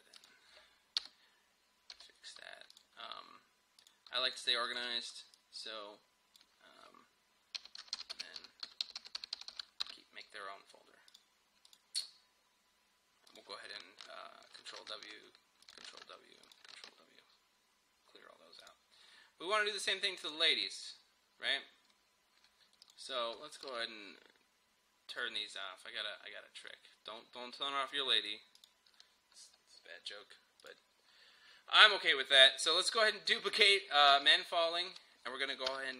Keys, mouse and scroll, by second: 0.2 click, 1.0 BackSpace, 2.0 m, 2.8-7.6 drag, 7.4-10.1 typing, 11.2 click, 14.8 ctrl+w, 15.7 click, 15.9 ctrl+w, 16.5 click, 16.8 ctrl+w, 18.6 click, 21.8 scroll down 1, 22.8 click, 26.6 scroll up 1, 28.6 click, 34.2 ctrl+d, 35.7 Return.